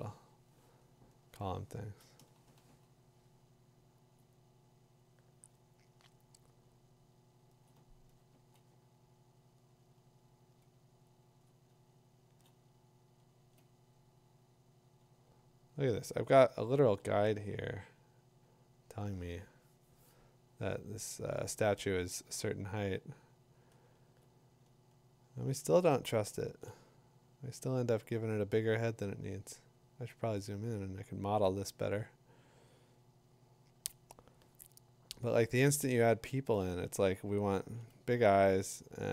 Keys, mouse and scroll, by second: 2.0 click, 2.2 click, 2.5-3.2 typing, 4.2 click, 7.3 click, 7.7 click, 11.2 click, 11.6 click, 13.2 click, 13.6 click, 17.4 click, 23.7 click, 26.7 click, 27.6 click, 37.8 click.